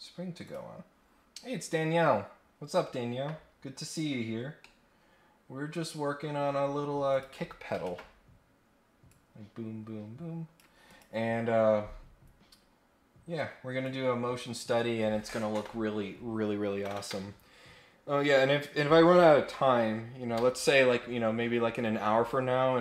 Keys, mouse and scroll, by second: 0.4 click, 3.5-3.8 scroll down 2, 3.8-4.4 scroll up 2, 4.5-6.0 middle drag, 6.2-6.7 scroll down 4, 7.1 click, 7.8 ctrl+Tab, 9.1-10.5 drag, 10.8 click, 13.8 click.